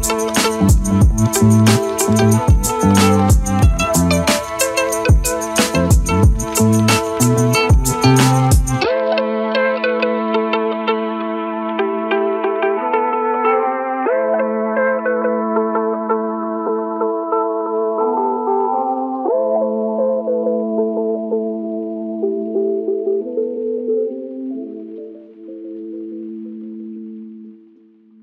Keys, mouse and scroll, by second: 0.2 shift+click, 1.3 shift+click, 1.7 middle click, 2.2 alt+middle click, 2.7 shift+click, 3.4 click, 4.3 click, 5.3 shift+click, 6.2 alt+middle click, 7.2 shift+click, 7.8 shift+click, 9.1 shift+click, 9.4 alt+click, 9.9 alt+right click, 10.2 alt+click, 10.9 3, 11.4 alt+click, 11.7 z, 12.5 alt+middle click, 12.9-14.0 alt+drag, 14.8-17.4 drag, 17.4 Tab, 17.7-18.2 alt+drag, 18.3-20.1 alt+drag, 21.6 click, 22.3-24.2 alt+drag, 25.0 click, 25.9-27.0 right drag, 27.0 Tab, 27.5-28.2 alt+drag.